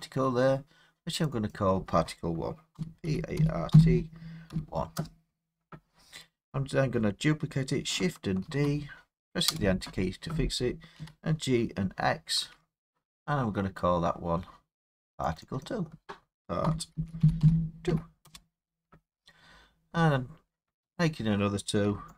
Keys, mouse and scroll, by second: 0.0 middle click, 0.0 middle click, 1.3 click, 1.4 scroll down 3, 1.5 click, 2.8-4.5 typing, 5.0 Return, 8.5 shift+d, 9.5 Return, 10.0-11.0 typing, 12.4 x, 12.9 click, 14.6 middle click, 15.4 click, 15.7 click, 16.7-17.9 typing, 18.3 Return, 20.8-22.1 typing.